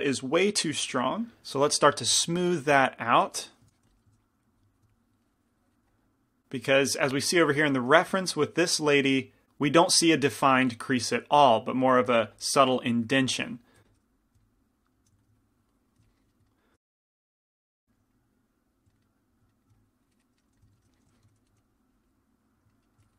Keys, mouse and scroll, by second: 1.9 middle click, 2.2 middle click, 2.7-4.0 drag, 2.7-4.0 right drag, 3.9 f, 4.0 middle click, 13.9 f, 16.1 middle click, 16.9 middle click, 17.2 g, 17.2 f, 17.7 f, 19.0 click, 20.6 f, 21.3 f, 21.3 p, 21.6 f, 21.9-23.1 drag, 22.8-23.1 middle drag.